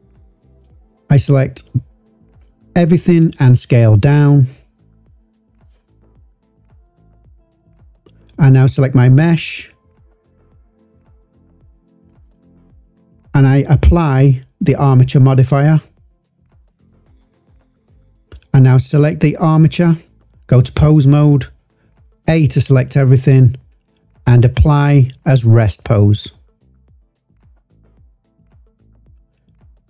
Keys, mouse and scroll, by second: 0.2 shift+click, 1.7 s, 4.3 click, 8.0 click, 8.4 click, 9.6 click, 11.4 click, 12.5 click, 13.9-15.8 drag, 17.9 click, 19.0 click, 19.7-20.4 drag, 22.0 a, 23.2-25.1 drag, 28.1 click.